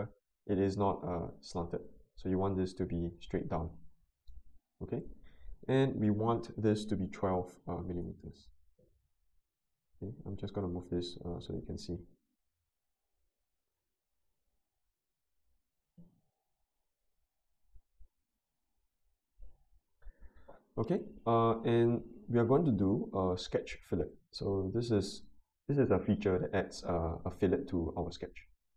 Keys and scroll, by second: 7.0-7.8 typing, 7.9 Return.